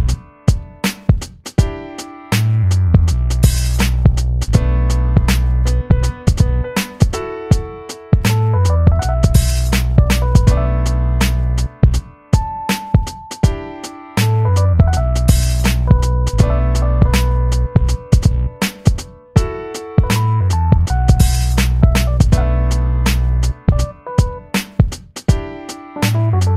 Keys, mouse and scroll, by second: 1.8 click, 2.9 shift+Up, 4.7 click, 5.5 shift+Down, 7.3 click, 8.2 shift+Up, 10.7 click, 11.3 shift+Up, 12.9 click, 13.7 shift+Down, 15.8 click, 16.6 shift+Up, 17.3 Up, 18.7 click, 19.8 shift+Down, 21.4-26.5 drag.